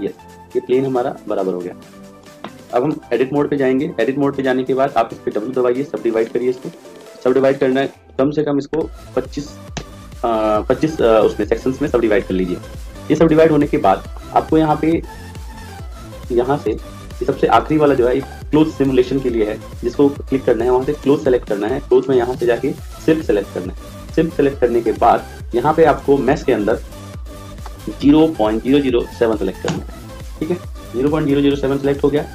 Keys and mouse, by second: 0.5 click, 3.1 Tab, 5.5 w, 8.1 click, 16.1 click, 21.0-23.3 drag, 25.9 click, 28.7 0.